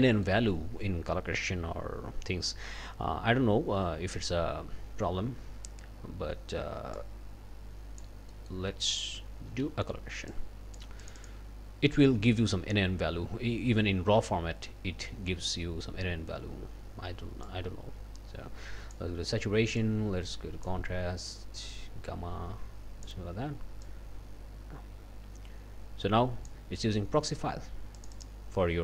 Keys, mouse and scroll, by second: 0.0 click, 7.0-8.2 drag, 8.3 click, 8.9 click, 9.5 c, 10.3 click, 17.4-19.1 drag, 19.8-20.8 drag, 21.7-23.2 drag, 23.8-26.7 drag, 28.0 click.